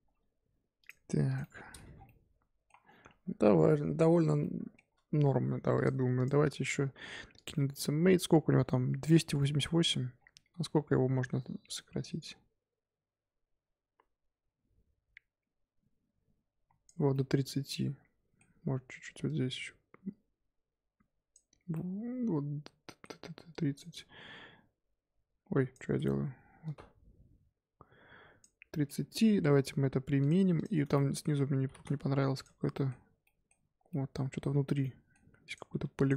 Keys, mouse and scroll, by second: 0.0 g, 1.2 click, 1.4 middle click, 1.7 scroll up 1, 1.8 Tab, 1.9 scroll down 2, 2.0-2.8 middle drag, 2.8 scroll down 1, 3.0-3.9 scroll up 9, 3.4 Tab, 3.9 Tab, 4.3 scroll down 1, 4.4-5.7 middle drag, 5.7 click, 7.4-8.0 drag, 8.0 Tab, 9.1 a, 9.4 middle click, 9.7 scroll up 1, 9.8 3, 10.1-10.5 scroll down 4, 10.5 Tab, 11.7-14.7 drag, 17.1-19.2 middle drag, 19.2-21.7 drag, 21.7-23.5 middle drag, 23.5 click, 23.9-28.7 drag, 28.7-30.2 middle drag, 30.2-30.8 drag, 30.8 Tab, 30.9 middle click, 31.4 scroll up 1, 31.6 scroll down 1, 31.8-34.5 typing, 32.3 click, 32.7 middle click, 33.2 middle click, 33.5 scroll up 2, 33.9 middle click, 34.8 middle click, 35.4 click, 35.7 3, 35.9 click.